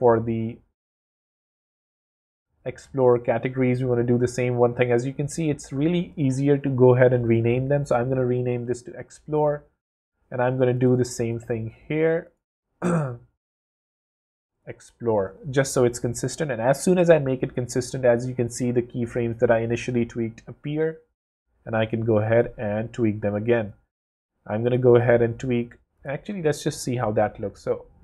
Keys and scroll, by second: 5.6 super+r, 5.9-7.2 typing, 14.1 super+r, 14.3-15.4 typing, 26.2 w.